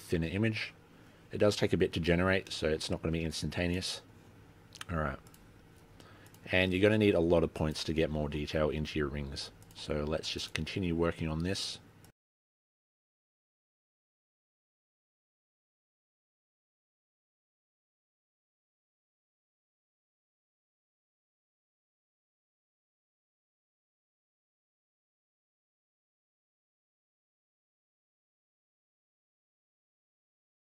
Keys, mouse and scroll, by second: 1.7 middle click, 2.3-3.4 scroll up 4, 3.4 middle click, 3.9 click, 4.3 click, 4.7 click, 4.9-5.3 scroll down 8, 5.1 click, 5.9-6.3 scroll up 5, 6.1 click, 6.3 click, 6.9 click, 6.9 scroll down 4, 7.0 click, 7.7 scroll up 4, 7.8 middle click, 8.0 click, 8.1 middle click, 8.3 click, 8.5 click, 9.6 click, 9.9 click, 10.5 click, 10.7 click, 10.9 click, 11.8 click, 12.4 click, 13.0 click, 13.2 click, 14.0 click, 14.2 click, 14.6 click, 14.8 click, 15.8 click, 15.9 click, 16.4 click, 16.8 middle click, 16.8 scroll up 9, 17.1 middle click, 17.3 click, 17.5 click, 17.7 click, 17.8 click, 18.0 scroll down 7, 18.2 click, 19.7-20.3 scroll up 10, 20.3 click, 20.5 click, 20.7 scroll down 5, 20.8 click, 21.1 click, 22.2 middle click, 22.3 scroll up 4, 22.4 middle click, 22.6 middle click, 22.8 click, 23.0 click, 23.3 click, 25.9 click, 26.4 click, 27.0 click, 28.8 middle click, 28.9 scroll up 9, 29.1 click, 29.3 middle click, 29.5 click, 29.8 click.